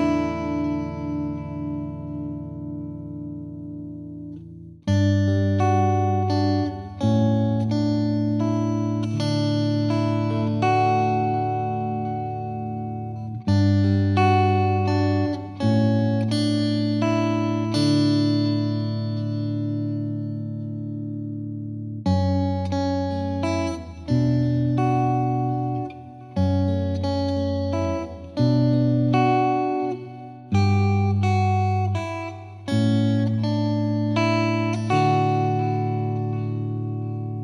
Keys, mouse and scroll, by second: 0.1-1.2 scroll up 1, 1.7-14.5 drag, 14.6 click, 15.1 middle click, 15.3 scroll up 1, 15.3 space, 15.4-15.8 scroll down 2, 15.8 middle drag, 16.1 Tab, 16.6-17.1 middle drag, 17.1 n, 17.4 middle drag, 17.6 scroll down 1, 17.7-18.2 shift+middle drag, 18.2 drag, 19.1 shift+a, 19.7 g, 21.4 shift+s, 22.8 shift+a, 22.9 s, 23.5-24.3 middle drag, 24.3 scroll up 1, 24.4 middle click, 24.7 scroll down 4, 25.0 s, 25.9 middle click, 25.9 scroll down 2, 26.1 Tab, 26.4 click, 27.2 middle click, 27.3 e, 28.7 scroll down 1, 28.9 middle click, 29.4 ctrl+b, 31.0 Tab, 31.2 right click, 32.0 s, 32.7-33.1 scroll up 2, 32.9 middle drag, 33.1 middle drag, 33.2 scroll down 1, 33.4 shift+middle drag, 33.6 scroll up 1, 33.8 shift+middle click, 33.9 scroll down 1, 34.0 middle drag, 34.2 shift+a, 36.0-36.5 scroll up 1, 36.5 ctrl+alt+KP_0, 37.1 shift+middle click.